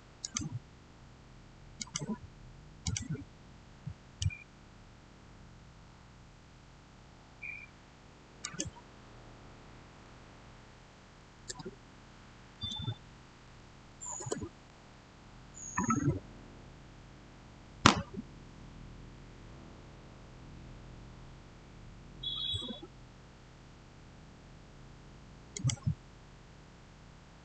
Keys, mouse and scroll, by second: 0.1 click, 3.3 click, 3.7-5.1 middle drag, 5.1 scroll up 1, 7.9-8.3 scroll down 1, 8.3 click, 10.9-11.8 typing, 12.4 Tab, 13.3 typing, 14.0 Return, 18.5-19.3 scroll down 1, 21.3-21.6 scroll up 1, 25.4 click.